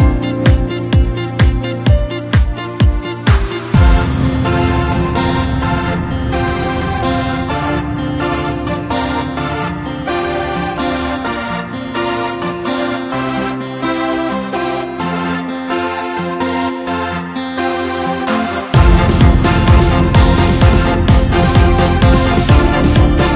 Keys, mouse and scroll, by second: 2.7-5.3 drag, 6.0-8.5 drag, 9.2 click, 10.6 click, 11.3-13.7 middle drag, 13.7 click, 14.8 click, 15.4-18.1 middle drag, 18.1-18.6 scroll up 1, 19.9 click, 20.1 click, 21.7 click, 23.2 drag.